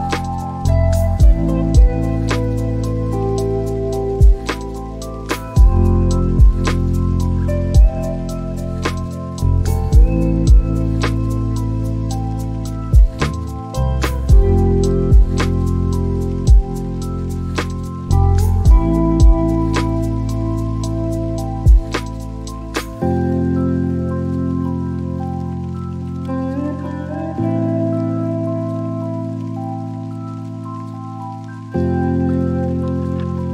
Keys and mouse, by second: 3.4 click, 6.0 click, 17.6 g, 19.7 y, 22.3 ctrl+click, 23.1 click, 24.6 shift+d, 25.7 y, 29.6 ctrl+click.